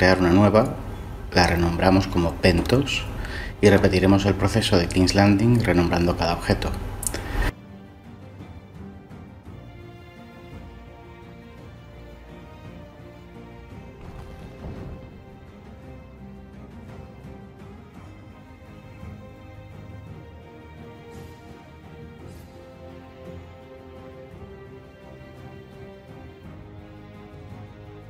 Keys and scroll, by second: 1.4-2.9 typing, 3.4 Return, 6.4 shift+a, 6.7 Tab, 6.8 Delete, 11.7 Tab, 12.4 Tab, 13.4 f, 14.6-18.6 typing, 20.9 g, 22.9-24.4 typing, 25.0 Tab, 27.6 shift+d, 27.8 Escape.